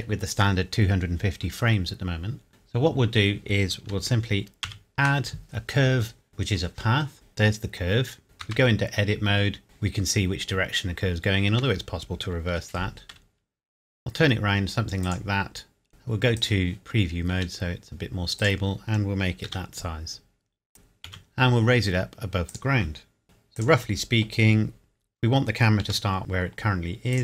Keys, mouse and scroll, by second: 2.5 ctrl+z, 4.7 shift+a, 6.3 click, 7.1 scroll down 1, 8.4 Tab, 9.6 KP_Decimal, 10.5 scroll down 1, 11.5 Tab, 12.5 r, 15.0 click, 15.5 scroll down 1, 16.4 click, 17.3 s, 18.4 click, 19.5 g, 21.1 z, 22.5 click, 23.2 Tab, 23.6 click, 25.8 g, 27.1 click.